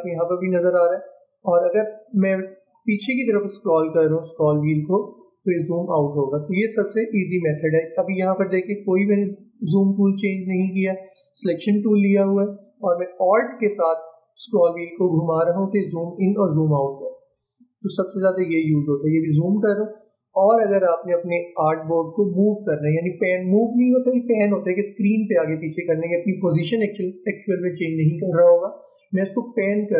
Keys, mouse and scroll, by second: 2.6-3.5 alt+scroll down 2, 4.0-5.6 alt+scroll down 1, 6.3 alt+scroll up 2, 14.0-15.6 alt+scroll up 1, 16.3 alt+scroll down 1, 16.5-17.0 alt+scroll up 1, 17.3-18.0 alt+scroll down 1, 18.4 alt+scroll up 1, 18.6 alt+scroll down 2.